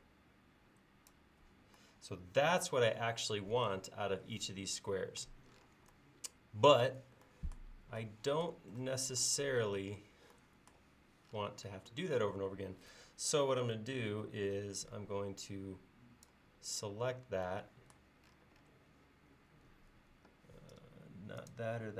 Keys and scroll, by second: 15.0 space.